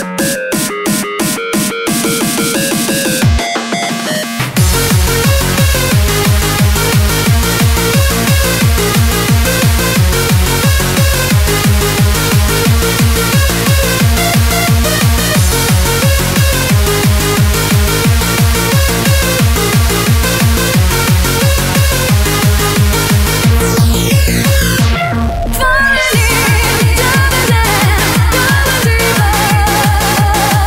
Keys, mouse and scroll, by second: 0.5 middle click, 5.9 KP_1, 9.8 KP_3, 11.2 KP_3, 11.2 KP_6, 13.2 KP_3, 13.2 KP_6, 13.4 KP_6, 15.2 KP_8, 16.5 KP_2, 18.3 KP_3, 23.4 KP_6, 23.6 KP_6, 27.3 KP_4.